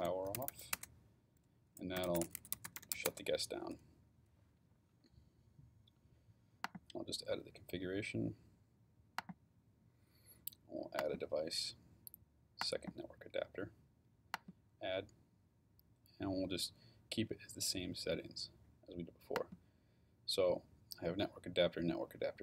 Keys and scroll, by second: 0.0-3.4 typing.